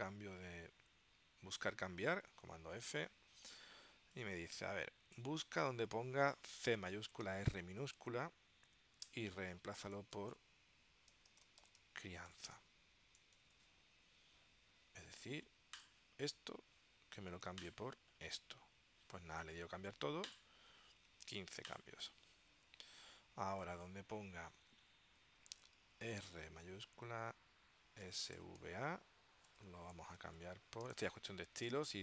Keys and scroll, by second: 2.6 super+f, 6.7 shift+c, 7.4 r, 9.2 Tab, 10.3-13.5 typing, 27.9-29.2 typing, 29.7 Tab, 30.3-32.0 typing.